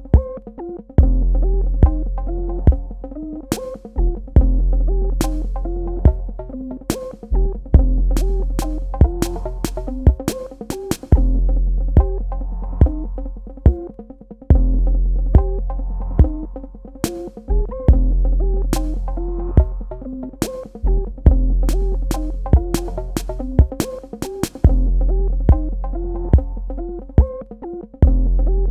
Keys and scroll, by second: 0.6 shift+Num_Lock, 3.4 Delete, 6.8 space, 10.2 z, 23.1 space, 27.4 v.